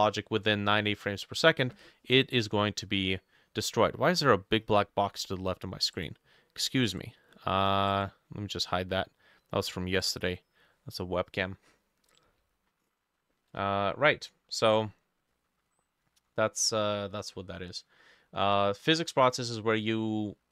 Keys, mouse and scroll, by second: 13.4 middle click, 14.2 middle click, 15.4 middle click, 16.1 middle click, 16.8 middle click, 17.4 middle click, 18.1 middle click, 19.1 middle click, 20.0 scroll down 1, 20.3 middle click.